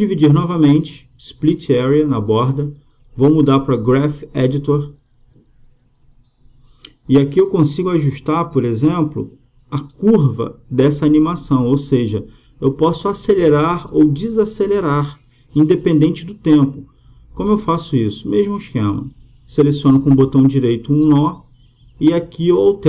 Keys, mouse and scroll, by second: 0.7-2.4 right drag, 4.6-6.5 drag, 8.4-10.1 drag, 12.8-14.1 middle drag, 14.1-15.9 drag, 14.1 right click, 20.1 middle click, 20.3-22.6 drag, 20.3-22.8 right drag, 22.6 g.